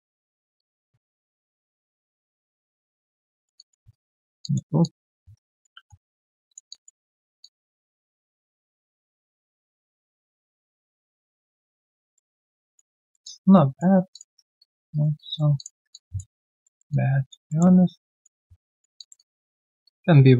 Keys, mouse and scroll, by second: 1.7 ctrl+shift+click, 3.3 alt+right click, 3.9 right click, 4.4 alt+click, 4.8 alt+double click, 5.4 double right click, 5.7 3, 5.8-6.2 scroll down 1, 6.7 alt+click, 7.0 alt+double click, 7.4 alt+click, 12.1 alt+middle click, 12.4 alt+scroll down 1, 12.6 alt+click, 13.0 alt+middle click, 13.2 alt+click, 14.3 alt+right click, 14.6 alt+click, 14.9 alt+right click, 15.1 alt+click, 15.9 alt+click, 16.3 alt+right click, 16.6 alt+middle click, 16.9 alt+click, 17.5 alt+middle click, 17.8 alt+scroll down 1, 18.1 alt+click, 18.4-18.7 scroll down 1, 18.9 alt+click, 19.1 alt+double click.